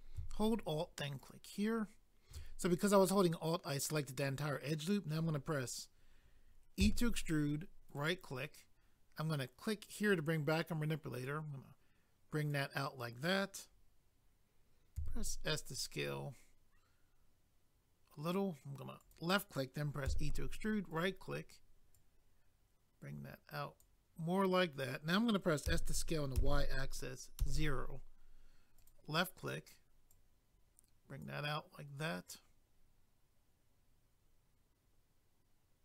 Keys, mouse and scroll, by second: 1.2 alt+click, 1.3 alt+click, 7.9 right click, 8.0 right click, 9.8 click, 9.9 click, 11.2 click, 19.0 click, 19.1 click, 20.1 e, 20.9 right click, 21.0 right click, 21.9 click, 28.8 click, 28.9 click, 30.1 click.